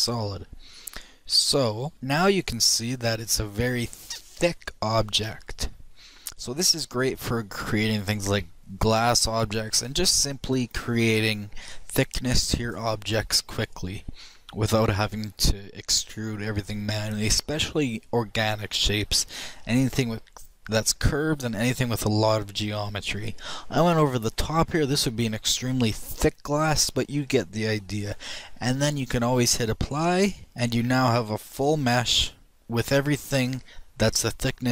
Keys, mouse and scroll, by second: 1.2 a, 1.9 click, 2.4-5.7 middle drag, 7.2-17.9 middle drag, 19.6-21.5 shift+middle drag, 21.8-23.9 shift+middle drag, 27.2-30.4 middle drag, 30.4-32.5 drag, 32.5-33.6 middle drag.